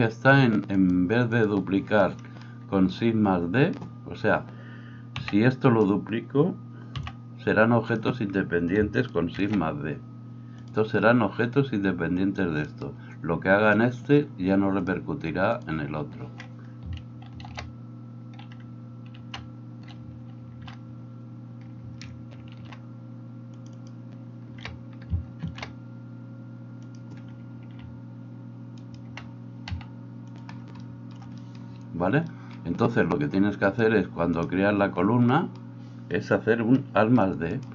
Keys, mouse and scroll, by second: 0.9-10.7 drag, 5.2 b, 6.9 b, 9.4 shift+d, 10.7-12.7 middle drag, 12.7-23.9 drag, 17.5 ctrl+w, 19.2 alt+r, 20.4 ctrl+e, 22.5 ctrl+r, 23.9-28.8 middle drag, 25.4 ctrl+b, 28.8 alt+right click, 29.1-33.6 middle drag, 29.6 s, 33.6-37.7 drag, 37.5 middle click, 37.5 right click.